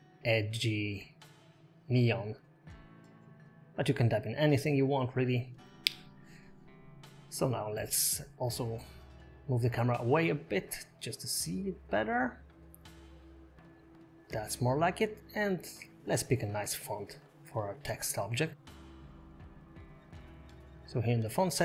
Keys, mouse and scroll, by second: 0.6 shift+n, 0.8 shift+e, 0.9 shift+o, 1.2 shift+n, 1.9 Tab, 3.4 click, 4.7 s, 6.9 g, 9.6 g, 13.4-14.1 scroll up 3, 14.3 Escape, 14.5 click, 15.1 click, 18.7 click, 19.6 click, 19.8 scroll down 6, 21.4 click.